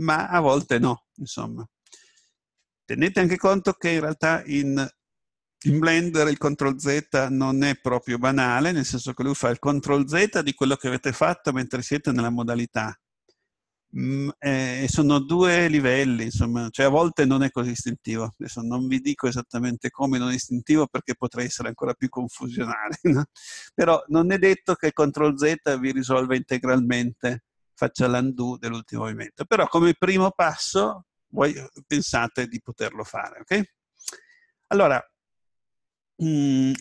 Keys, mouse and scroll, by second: 35.1 middle click, 35.7-36.8 scroll down 1.